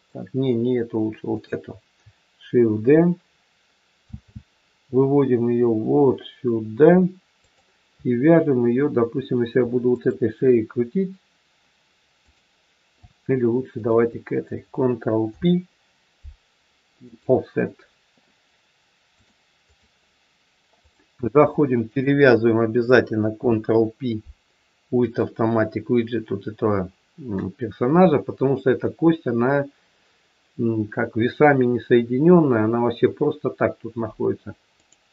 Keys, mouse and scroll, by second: 1.1 click, 3.9 shift+d, 9.8 shift+click, 12.2 click, 13.7 shift+click, 15.2 ctrl+p, 19.2 click, 20.7 click, 21.8 shift+click, 22.1 shift+click, 23.3 ctrl+p, 27.7 scroll up 1, 34.7 click.